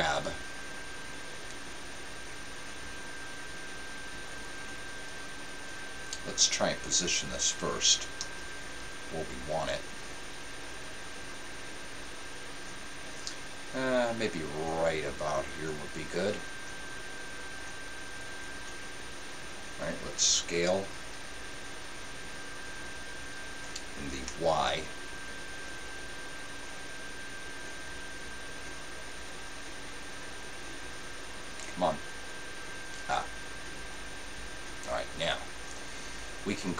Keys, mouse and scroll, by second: 8.1 click, 8.1 g, 20.9 s.